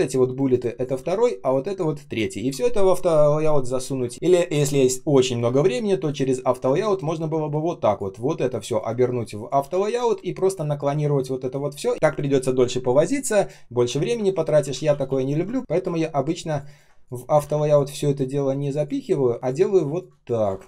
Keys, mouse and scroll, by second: 4.0 ctrl+z, 9.5 shift+x, 14.3 ctrl+z, 16.4 ctrl+click, 16.6 ctrl+click, 17.3 ctrl+x, 19.9 alt+click, 20.6 ctrl+z.